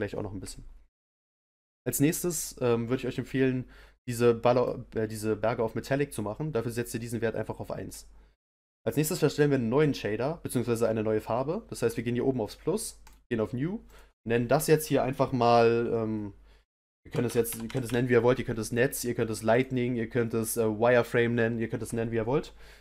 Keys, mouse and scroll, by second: 4.1-19.5 drag.